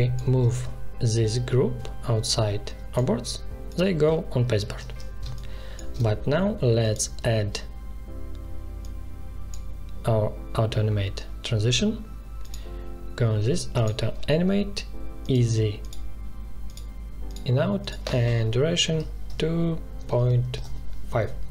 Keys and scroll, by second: 4.7 ctrl+z, 5.1 space, 18.8 2, 19.2 ., 19.9 5, 20.5 Return.